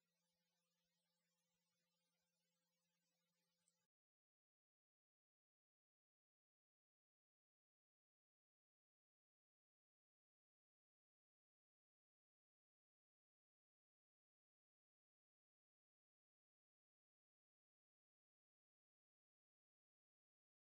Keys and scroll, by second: 7.5 ctrl+Page_Down, 11.1 ctrl+Page_Down.